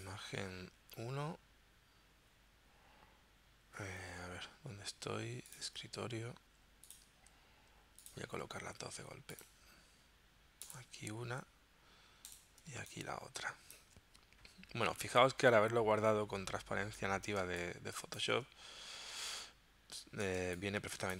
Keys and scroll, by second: 12.8 space, 17.4 space, 20.4 space.